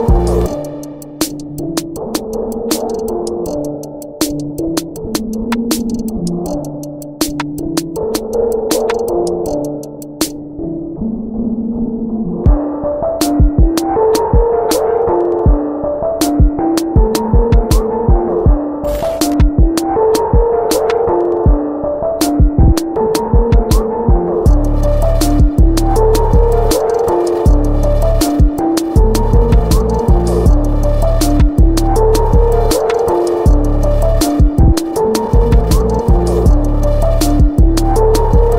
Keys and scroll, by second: 10.6 space, 13.9 ctrl+z, 24.1-25.0 typing, 26.8 ctrl+t, 29.9 Right, 29.9 Right, 30.0 Right, 30.0 Up, 30.1 Up, 30.1 Left, 30.2 Left, 30.2 Left, 30.3 Left, 30.6 Left, 30.7 Left, 30.8 Return.